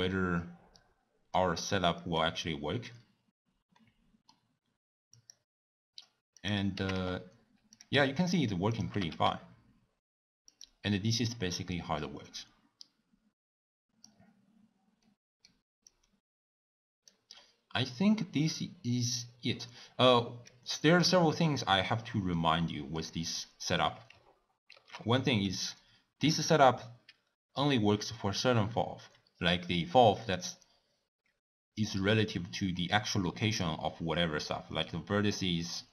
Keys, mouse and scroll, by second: 1.5 click, 2.1-5.3 drag, 6.4 click, 6.7 g, 7.9 s, 8.9 g, 11.8-15.9 drag.